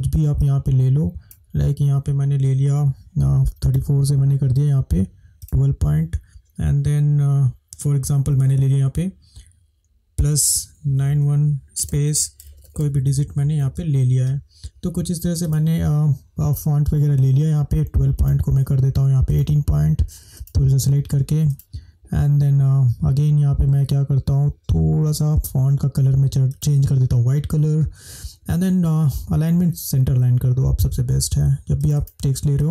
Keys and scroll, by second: 10.3-13.7 typing.